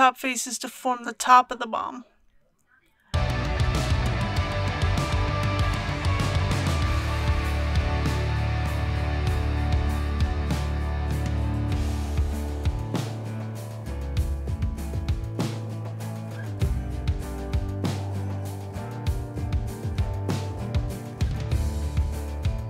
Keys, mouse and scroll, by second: 0.2 a, 0.7 KP_1, 3.1 e, 6.8 click, 7.2-7.7 typing, 9.9 click, 10.4 typing, 13.9-14.3 typing, 16.6 click, 17.5 middle click, 17.6 middle click, 19.2 KP_1, 20.6 KP_7, 21.9 i.